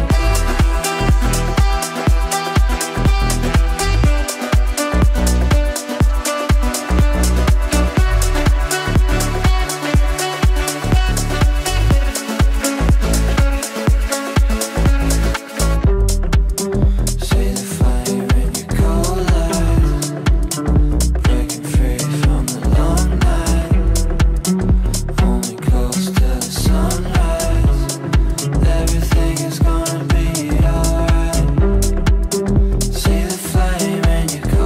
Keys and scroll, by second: 9.8 Delete, 12.2 shift+F2, 12.4 Escape, 16.7 g, 24.9 g.